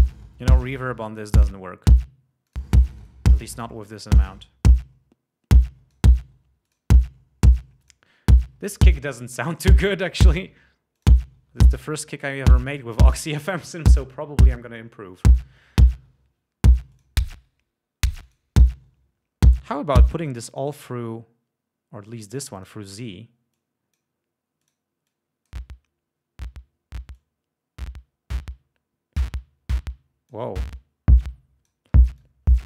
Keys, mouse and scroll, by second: 1.5 click, 2.6 click, 3.0 click, 4.3-6.2 drag, 6.7 click, 7.9 click, 11.1 click, 12.3 click, 17.0 click, 18.3 click, 20.0 click, 22.4 click, 23.6 click, 24.7 click, 25.2 click, 27.3-30.6 drag, 30.8-32.0 drag, 32.3-32.6 drag.